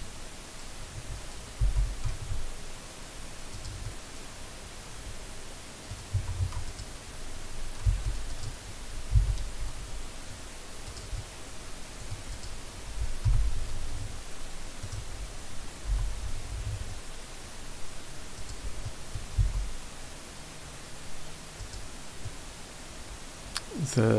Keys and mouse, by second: 1.6 g, 2.0 x, 3.5 click, 3.8 middle click, 4.0 click, 4.2 click, 4.6-5.9 middle drag, 6.1 Tab, 6.4 Tab, 7.9 3, 9.1 e, 10.9 right click, 11.1 middle click, 11.8 click, 12.3 click, 13.2 i, 14.8 right click, 15.9 i, 18.4 click, 18.8 middle click, 19.4 e, 21.6 click, 22.3-24.1 middle drag.